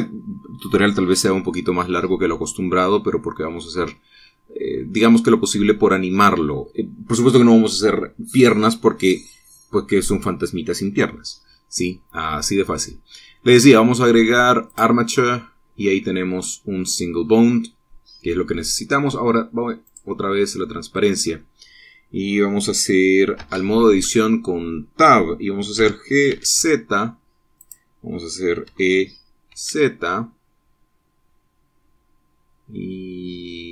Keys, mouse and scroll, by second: 15.4 click, 16.5-19.6 middle drag, 20.6 click, 24.2 Tab, 26.5 g, 27.0 z, 28.3 click, 29.4 e, 30.2 z.